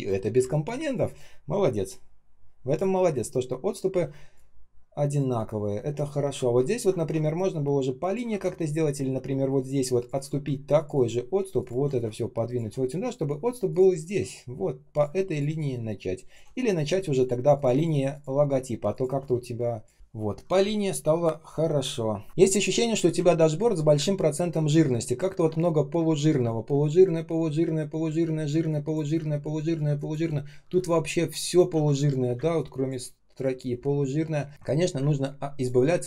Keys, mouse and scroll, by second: 0.3 space, 0.8 space, 0.9 space, 4.0 space, 4.5 space, 4.5 space, 6.6 ctrl+scroll up 1, 8.2 ctrl+z, 11.5 shift+click, 16.7 shift+click, 17.1 shift+click, 17.5 shift+click, 17.6 shift+click, 18.0 shift+click, 18.8 shift+click, 19.9 ctrl+scroll up 1, 20.5 space, 21.0 space, 21.0 space, 22.1 ctrl+scroll down 1, 22.2 space, 23.3-24.0 ctrl+scroll up 1, 24.5 ctrl+scroll down 1, 24.9 ctrl+scroll up 1, 28.4 space, 28.9 space, 28.9 space, 30.6 r, 31.6 ctrl+z, 32.3 space, 32.8 space, 32.8 space, 34.9 space, 35.4 space, 35.4 space.